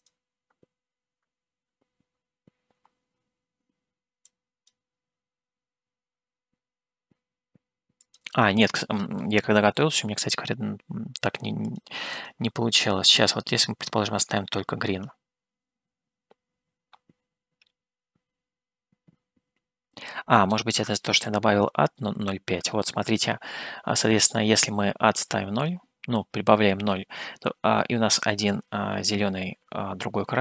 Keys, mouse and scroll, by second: 0.0 click, 11.6 click, 12.2 click, 20.5-22.8 drag.